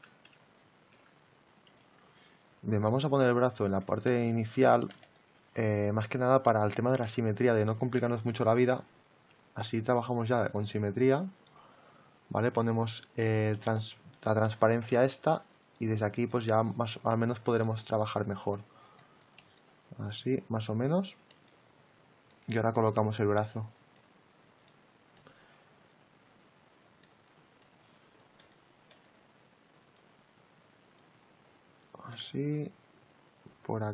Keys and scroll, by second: 0.0 x, 2.9 ctrl+z, 9.3 x, 18.3 ctrl+z.